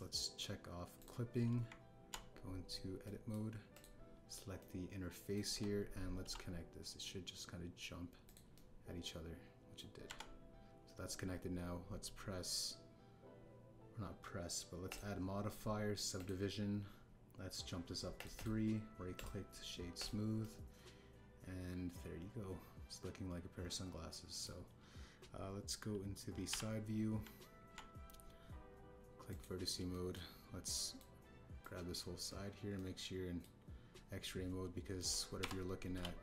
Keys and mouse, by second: 0.7-1.8 drag, 1.9 click, 2.6 Tab, 4.0 click, 4.7 click, 5.5 click, 6.4 KP_1, 7.2 e, 9.5-10.7 drag, 11.0 Tab, 15.9-17.2 drag, 19.1 click, 19.3 click, 20.1-21.0 drag, 21.4-25.4 middle drag, 27.4 KP_3, 28.2 Tab, 30.2 click, 30.9 shift+middle click, 31.6 click, 32.6 click, 33.7 middle click, 35.9 click.